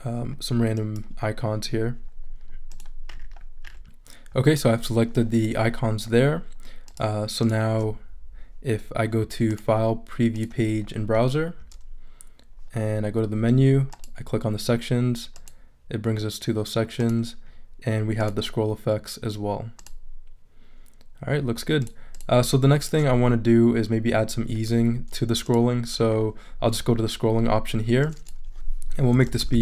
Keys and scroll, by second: 28.9-29.6 typing.